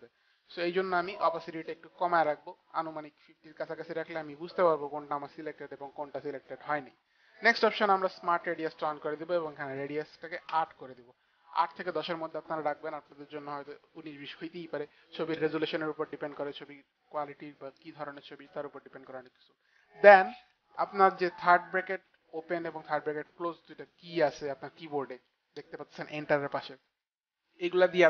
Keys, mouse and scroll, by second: 1.5 click, 7.9 click, 10.0 KP_8, 11.1 Return, 12.3 Return, 12.3 KP_8, 14.3 Return.